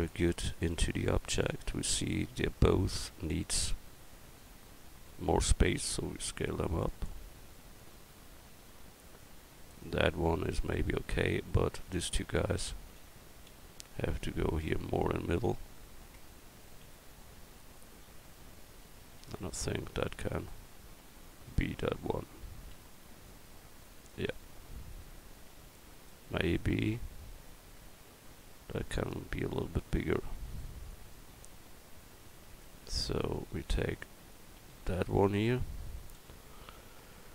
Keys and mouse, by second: 2.7 middle click, 3.3 middle click, 5.3 s, 11.2 Tab, 11.8 a, 13.0 l, 13.5 l, 14.2-15.8 drag, 16.2 Tab, 32.5-33.5 right drag, 33.5 Tab, 34.6 a, 36.2 l.